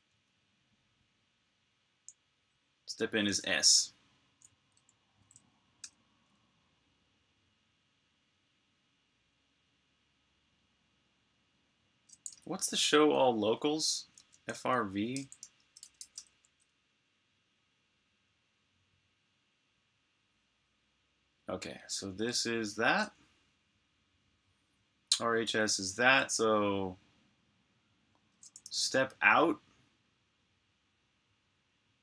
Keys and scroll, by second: 3.3 super+Tab, 5.1-5.7 typing, 12.2 super+Tab, 15.0-16.4 typing, 28.6 super+Tab.